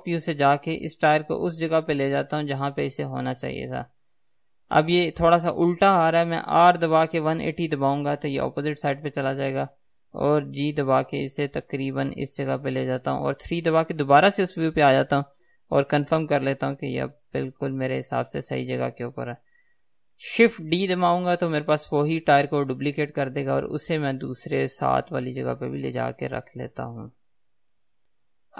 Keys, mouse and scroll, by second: 0.9 g, 4.9 click, 6.8 r, 8.9 click, 10.8 g, 13.7 KP_3, 20.9 shift+d, 27.8 click.